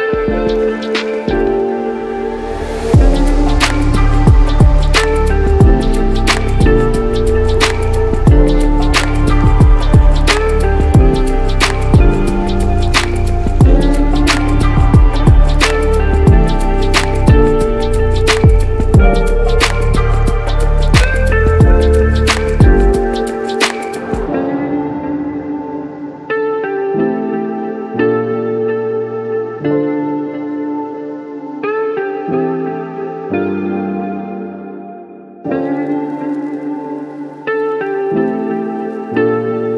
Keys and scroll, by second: 9.1 ctrl+t, 10.2 ctrl+z, 13.2 ctrl+alt+z, 13.7 ctrl+shift+z, 15.8 ctrl+t, 24.8 ctrl+z, 31.3 ctrl+t.